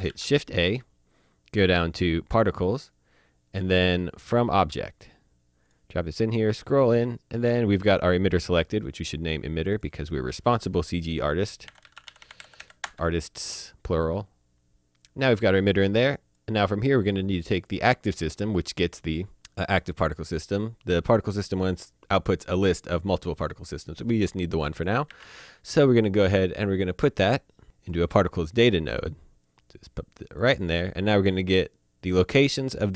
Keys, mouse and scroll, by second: 0.0 click, 0.1 a, 4.8 click, 5.9 scroll up 1, 9.2 click, 11.6-12.6 typing, 12.8 Return, 15.8 click, 17.7-20.0 drag, 24.5 click, 25.1 a, 27.8 click.